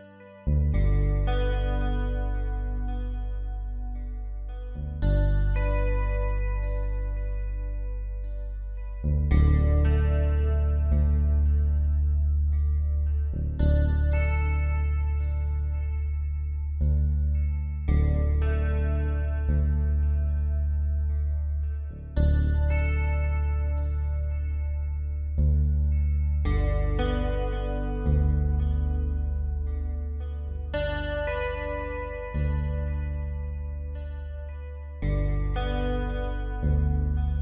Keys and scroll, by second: 0.0-0.4 typing, 3.0-3.7 typing, 8.5 space, 9.6 typing, 11.3 x, 17.8 x, 23.9 space, 27.1 Delete, 34.4 ctrl+z.